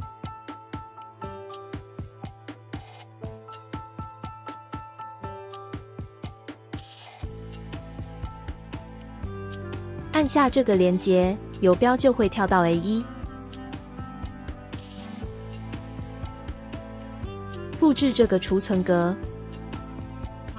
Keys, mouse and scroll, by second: 16.7-18.7 right drag.